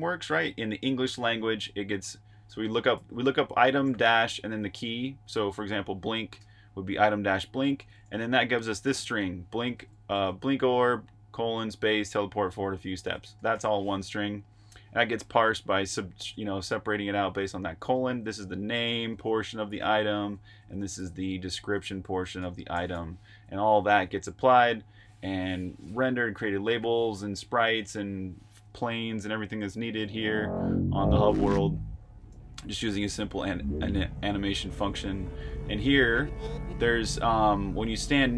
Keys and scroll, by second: 10.7-11.9 typing, 15.2 Escape, 15.2-16.3 typing, 17.4 typing, 22.9-25.0 typing, 23.6 super+r, 29.9-31.3 typing, 33.1-35.0 typing, 36.3-37.4 typing.